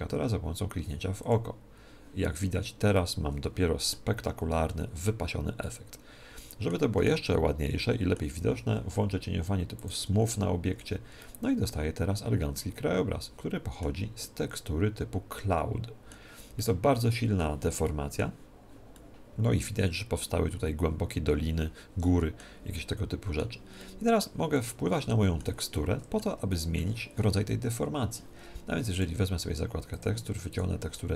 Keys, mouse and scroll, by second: 0.8-3.0 drag, 2.9-4.7 middle drag, 4.2 t, 5.1 middle click, 5.1-5.6 scroll down 1, 5.6-8.8 middle drag, 8.4 t, 9.7-11.5 drag, 10.6 t, 11.3-13.1 middle drag, 14.2-15.9 middle drag, 16.5-20.8 middle drag, 22.7-28.2 middle drag, 28.8-31.1 drag.